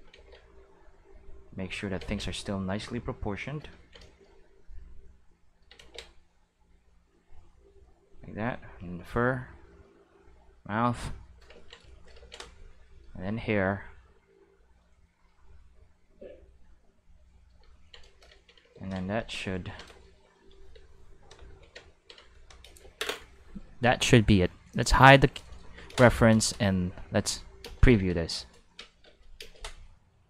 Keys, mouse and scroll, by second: 0.1 ctrl+z, 0.9 click, 2.0 ctrl+z, 2.6 click, 4.1 shift+middle click, 5.0 click, 5.8 ctrl+z, 6.4-7.4 drag, 7.8-9.5 drag, 10.4 click, 11.7 ctrl+shift+middle click, 13.4-14.8 drag, 15.5 click, 16.1 click, 16.5 click, 20.3 click, 20.7 space, 20.9-21.5 drag, 21.5 space, 22.3 click, 22.6 space, 23.8 space, 24.7 click, 25.5 middle click, 25.9 ctrl+space, 26.2 middle click, 26.4 shift+middle click, 26.9 q, 27.6 space, 27.9 space, 29.4 space.